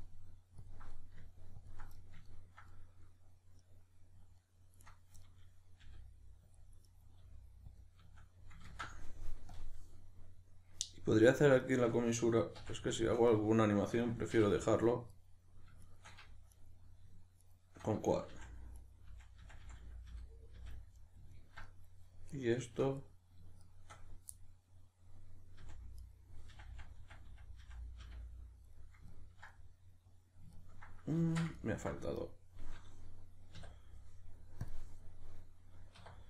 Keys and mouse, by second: 0.9 middle click, 1.6-1.9 ctrl+drag, 1.9-4.9 middle drag, 4.9 right click, 5.2-6.6 middle drag, 5.9 g, 6.6 click, 6.9 right click, 7.2 g, 7.8 click, 8.7 ctrl+z, 9.5-11.6 drag, 11.6 shift+right click, 12.6 f, 13.0-14.3 shift+middle drag, 14.3 2, 15.1 right click, 15.9 shift+right click, 16.5 right click, 17.4 shift+right click, 18.3 f, 18.8 right click, 19.1 f, 21.0-22.3 middle drag, 22.3 right click, 23.0 right click, 23.6 shift+right click, 24.3-26.0 middle drag, 25.6 f, 26.0 right click, 26.5 f, 28.7-32.2 middle drag, 31.2 ctrl+z, 32.2 right click, 33.6 w.